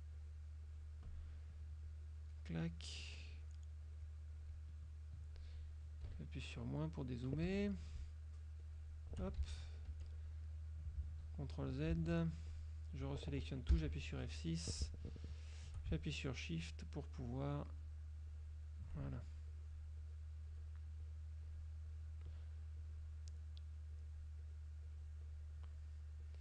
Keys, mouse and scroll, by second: 0.2 shift+click, 0.8 shift+click, 2.0-2.6 shift+drag, 2.8 shift+click, 3.4 shift+click, 3.9 shift+click, 4.4 shift+click, 5.9 click, 6.2 KP_Subtract, 6.9 click, 7.6 Escape, 8.8 shift+click, 9.6 ctrl+shift+z, 10.0 ctrl+shift+F2, 12.0 ctrl+z, 12.6 ctrl+click, 13.8 F6, 14.4 click, 16.7 shift+click, 17.3 shift+click, 17.9 shift+click, 18.4 shift+click, 19.6 shift+click, 21.2 shift+click, 22.9 shift+click, 23.4 shift+click, 24.0 shift+click, 24.6 shift+click, 26.3 shift+click.